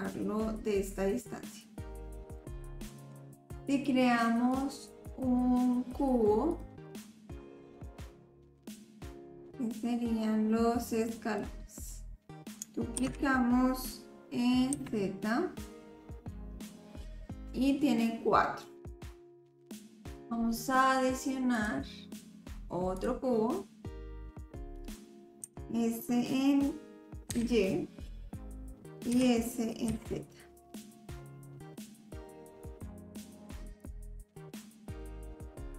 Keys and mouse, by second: 1.6 middle click, 2.1 click, 2.1 right click, 2.4 click, 2.4 right click, 4.6-6.7 drag, 7.2 click, 7.7 s, 8.4 s, 9.4-11.4 drag, 13.0 shift+d, 18.9 shift+d, 19.2 shift+d, 21.6-23.1 drag, 25.4 s, 29.1 s, 32.8 s, 33.6-35.0 drag, 35.6-35.7 drag.